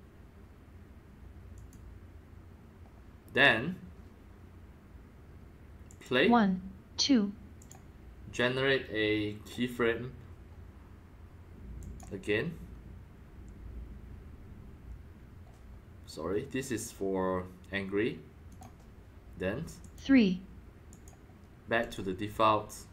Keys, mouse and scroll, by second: 1.5 click, 2.1-4.8 drag, 5.9 click, 7.6 click, 8.1-11.1 drag, 11.8 click, 13.7-17.0 drag, 18.5-19.5 drag, 19.8 click, 20.9 click, 21.8 click.